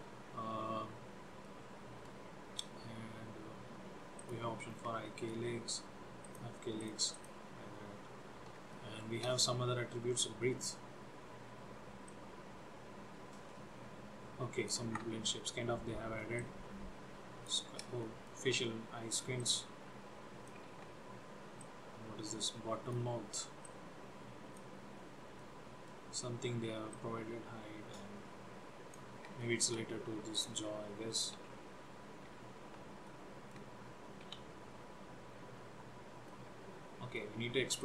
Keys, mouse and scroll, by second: 0.9 scroll up 2, 1.5 middle click, 4.3 click, 4.8 scroll down 3, 5.1 shift+middle click, 6.4 click, 6.9 click, 7.3 click, 8.9 shift+middle click, 9.5-10.4 scroll up 5, 12.2 click, 15.1 ctrl+z, 16.6 click, 18.3 shift+middle click, 19.5 click, 20.9 ctrl+z, 21.8 click, 23.8 click, 25.1 scroll up 2, 25.6 middle click, 27.0 click, 29.5 shift+middle click, 30.5 click, 31.5 r, 33.2 middle click, 34.4 g, 36.4 middle click.